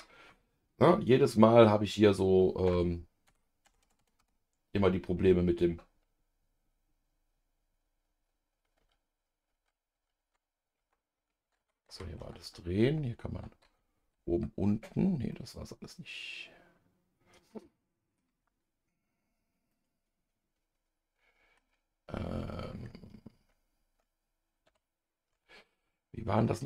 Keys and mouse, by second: 2.7 KP_Subtract, 3.3 KP_Subtract, 3.6 KP_Add, 3.8 KP_Add, 4.0 KP_Add, 4.2 KP_Add, 8.8-14.2 typing, 15.3-18.2 middle drag, 19.7-21.6 middle drag, 24.7 ctrl+KP_Divide, 26.4-26.6 middle drag.